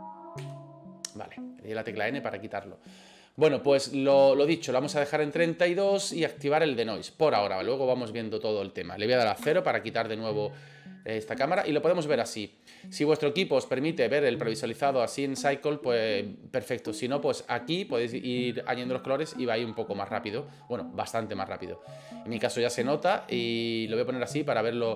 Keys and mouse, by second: 0.4 n, 9.4 KP_0, 11.1 middle click, 11.7 shift+middle click, 12.9-14.3 middle drag, 17.4 click, 18.8-20.3 middle drag, 22.5 middle click, 24.0 drag, 24.5 middle click.